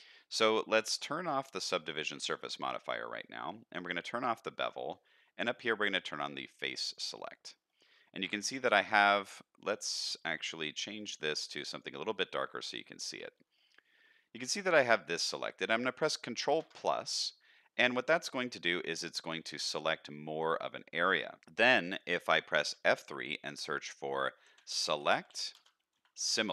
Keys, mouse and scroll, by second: 1.3 click, 3.9 click, 5.8 click, 6.8 click, 7.3 shift+middle click, 7.6 middle click, 8.2 scroll up 1, 8.4 shift+middle click, 8.8 middle click, 10.1-11.9 drag, 12.2 shift+middle drag, 12.6 middle click, 13.1 shift+middle click, 13.5 middle click, 14.8 middle click, 16.6 ctrl+KP_Add, 19.6 middle click.